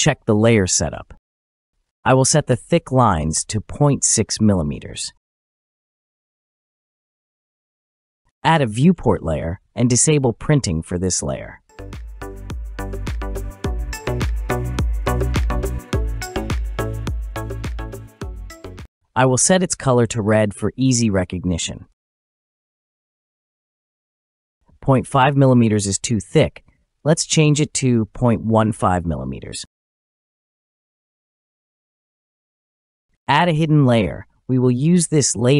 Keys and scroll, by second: 11.3 typing, 12.8 typing, 14.7 Return, 34.0 BackSpace.